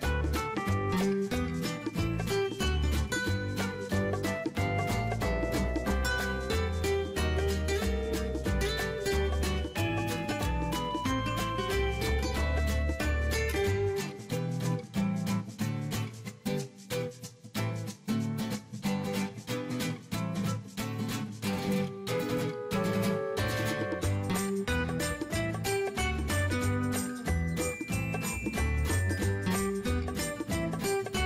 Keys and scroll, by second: 7.2 ctrl+x, 7.8 ctrl+shift+v, 17.4 ctrl+shift+v, 28.2 ctrl+x, 28.6 ctrl+shift+v.